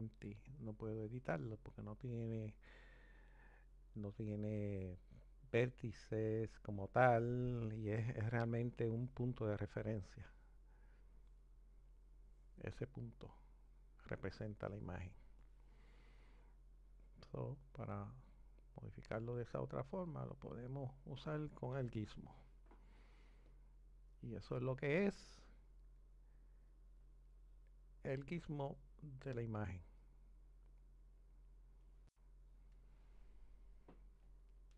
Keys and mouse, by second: 1.8-6.5 drag, 11.0 click, 13.5 click, 15.4 click, 17.6 click, 19.2 click, 23.6 click.